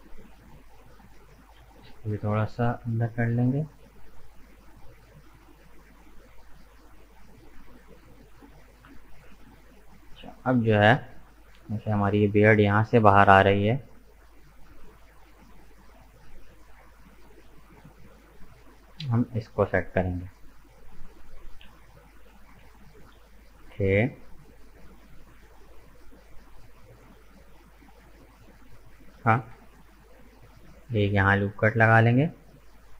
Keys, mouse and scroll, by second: 0.1 right click, 0.5-2.2 middle drag, 2.2 g, 4.2-7.2 middle drag, 8.1-9.5 middle drag, 9.5 right click, 10.0-13.0 middle drag, 13.4 middle click, 14.2-15.1 scroll down 5, 15.1-15.9 scroll up 5, 15.9-19.5 middle drag, 19.5-20.0 scroll up 1, 20.0-22.5 middle drag, 22.5 k, 30.6 right click, 30.9-32.9 middle drag.